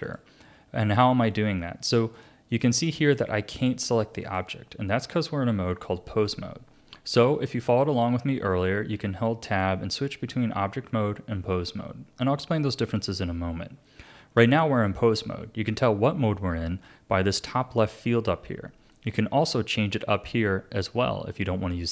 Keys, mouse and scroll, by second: 0.0 click, 2.5 click, 3.0 click, 3.5 click, 3.9 click, 4.2 click, 8.9 Tab, 18.9-21.9 drag.